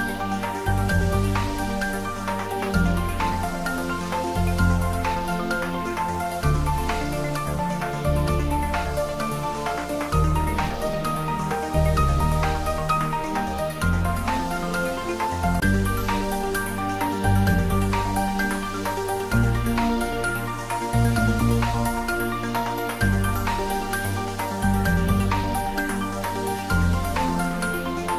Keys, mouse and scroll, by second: 1.7 click, 1.8 click, 5.8 click, 9.3-10.4 scroll down 1, 13.5 click, 17.2 Tab, 23.8-24.4 scroll up 1.